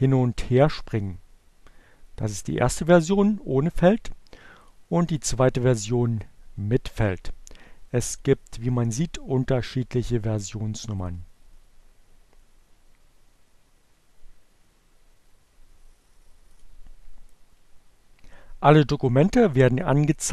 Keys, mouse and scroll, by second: 4.1 click, 7.2 click, 11.2 click.